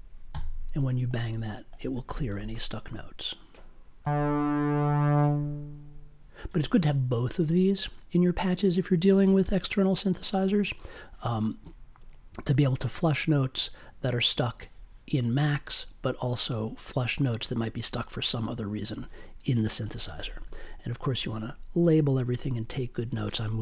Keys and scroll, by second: 0.3 b.